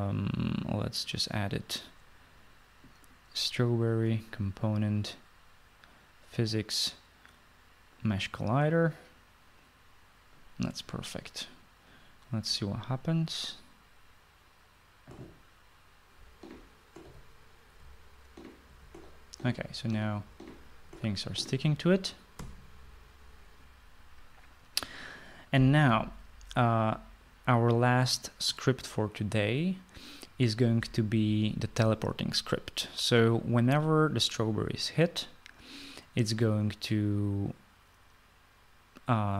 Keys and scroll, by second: 17.1-21.2 typing, 22.5 typing, 23.4 Escape.